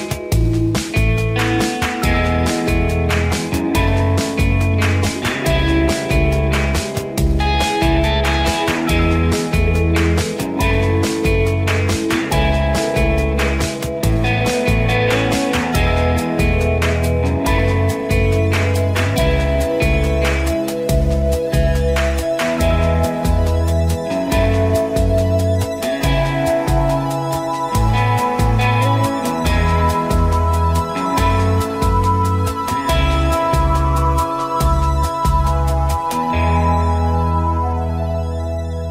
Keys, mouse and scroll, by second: 1.2 ctrl+g, 2.9 click, 6.6-14.0 drag, 16.4 ctrl+-, 17.0 click, 18.8-19.6 typing, 21.0 ctrl+=, 25.3 ctrl+=, 27.6 space, 28.0 click, 28.1 space, 29.1 space, 38.2 ctrl+-.